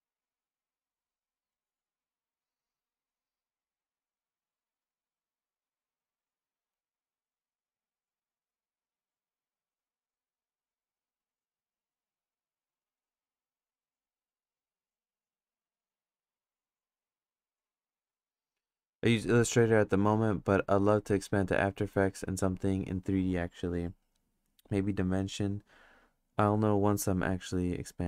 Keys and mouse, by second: 0.3 click, 1.6-4.7 drag, 6.0 click, 6.7 ctrl+z, 7.1 click, 7.9 click, 9.0 click, 9.9 click, 10.6 click, 11.3 click, 11.9 click, 12.3 click, 13.0 click, 13.8 click, 14.3 click, 14.8-15.9 drag, 16.3 click, 17.4 click.